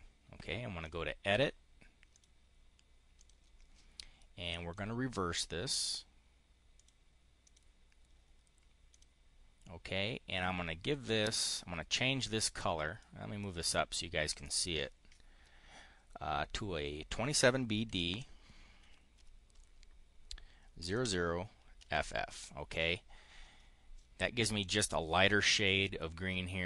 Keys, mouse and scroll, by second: 0.7 click, 2.0 click, 3.1 click, 4.6-5.6 drag, 6.7 click, 7.3 click, 8.8 click, 10.9-12.0 drag, 12.9 click, 17.8 2, 18.7 b, 19.0 d, 20.7 KP_0, 21.6 f.